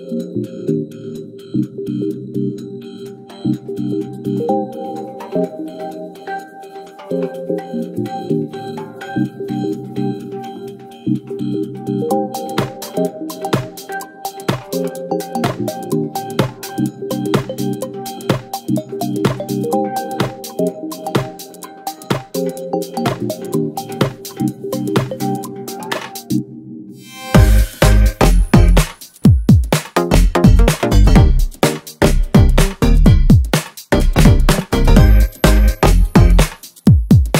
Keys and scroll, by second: 0.0-0.8 typing, 0.3 Return, 0.9 Return, 2.4 0, 3.1 shift+a, 5.3 g, 5.4 x, 9.3 6, 9.5 Return, 11.3 g, 12.4 g, 13.9 shift+d, 16.7 shift+d, 17.0 shift+d, 17.3 shift+d, 18.5 Escape, 18.7 ctrl+z, 21.2 shift+d, 21.8 shift+d, 23.0 g, 25.4 n, 25.6 n, 26.3 space, 26.9 space, 33.0 Tab, 33.7 g, 35.2 g, 35.7 g.